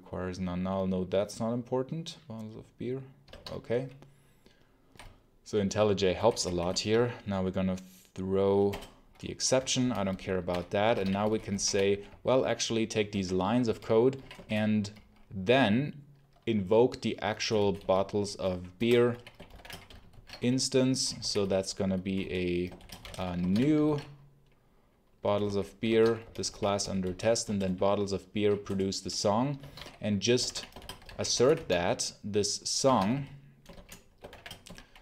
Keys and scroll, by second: 3.1 Escape, 3.4 h, 4.9 b, 6.0 h, 6.6 alt+Return, 8.6 Return, 9.2-14.0 typing, 17.2-20.0 typing, 18.7 Return, 21.1-23.9 typing, 25.3-28.0 typing, 25.3 Return, 28.6 Return, 29.3-35.0 typing.